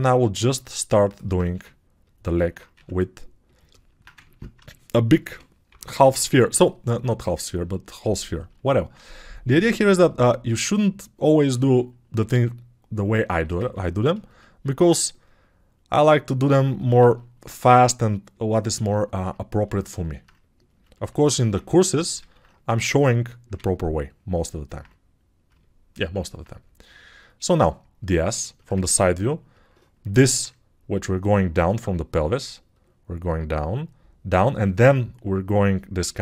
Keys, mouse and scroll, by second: 2.2-13.5 alt+right drag, 4.2 ctrl+Tab, 5.3-6.3 typing, 6.6-13.5 drag, 14.8 alt+q, 20.3 click, 20.3 middle click, 20.3 right click, 22.3 alt+q.